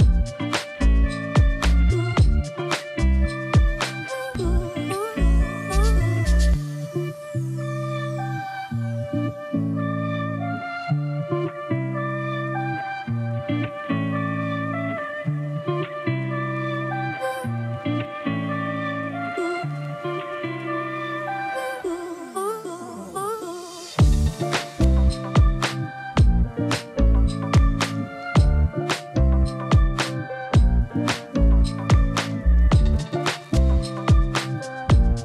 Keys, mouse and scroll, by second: 0.0-5.4 typing, 3.3 shift+Return, 7.0 click, 8.7 click, 9.0 ctrl+t, 10.2-13.3 drag, 13.3-14.9 typing, 13.8 click, 15.7-17.4 drag, 17.4-19.3 typing, 18.0 click, 20.1-24.5 drag, 25.0 typing, 26.4 right click, 28.1 click, 28.1 click, 30.6-31.0 typing, 30.7-33.0 drag, 33.0 typing.